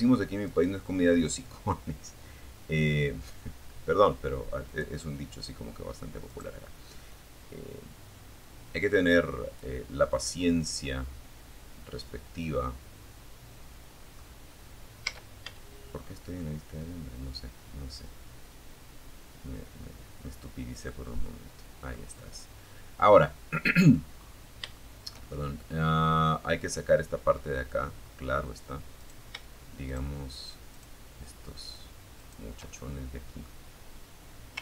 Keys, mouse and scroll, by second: 2.9 click, 3.2 middle click, 4.5 right click, 5.3-7.9 drag, 8.0 scroll down 1, 8.3 middle click, 8.5 scroll up 1, 13.3 z, 14.2 scroll down 1, 14.5-20.3 middle drag, 20.3-22.3 middle drag, 22.3-22.7 scroll up 1, 22.9-25.7 shift+middle drag, 26.0-26.8 scroll up 2, 27.1 right click, 28.1 shift+right click, 28.9 shift+right click, 30.3 shift+right click, 30.9 shift+middle click, 33.2 ctrl+z, 34.3 shift+right click.